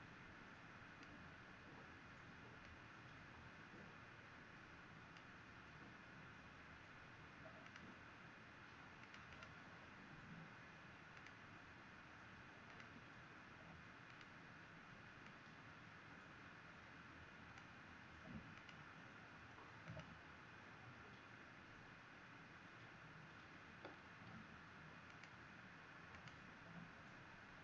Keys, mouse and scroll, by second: 9.3 click, 11.1 click, 26.2 click.